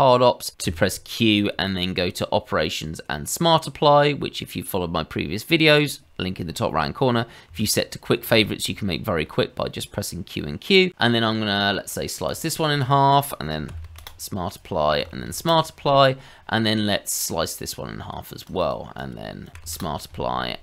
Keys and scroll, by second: 0.6 q, 13.6 q, 13.8 q, 15.0 q, 15.1 q, 19.5 q, 19.6 q.